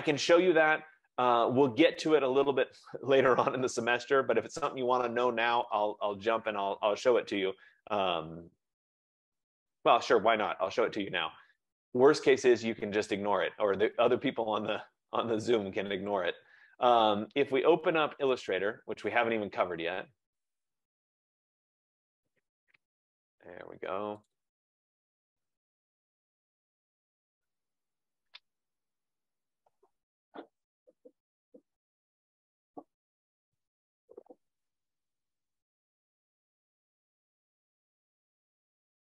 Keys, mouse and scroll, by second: 13.3 click, 16.4 click, 27.5 click, 36.4 F15.